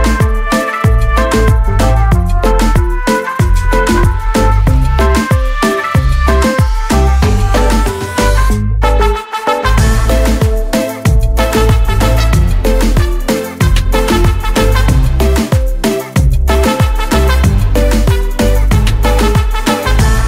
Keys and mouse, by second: 13.2 click.